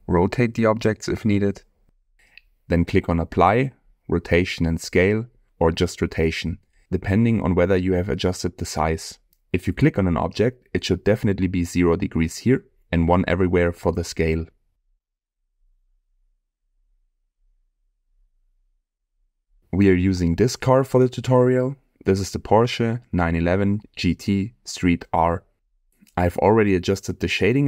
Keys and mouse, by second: 2.4-8.3 drag, 21.2-22.2 middle drag, 24.8-26.3 middle drag, 26.6-27.2 middle drag, 27.4-27.6 shift+middle drag.